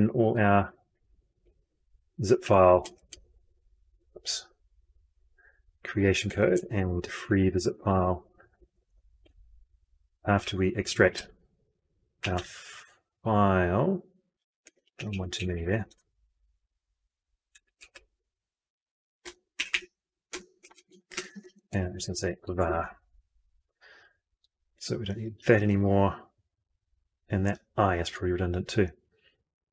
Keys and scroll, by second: 1.0 ctrl+x, 1.6 ctrl+v, 7.0 ctrl+x, 7.8 ctrl+v, 14.7 ctrl+x, 14.9 ctrl+Up, 15.4 ctrl+Up, 15.8 ctrl+v, 17.2 ctrl+v, 25.1 ctrl+y.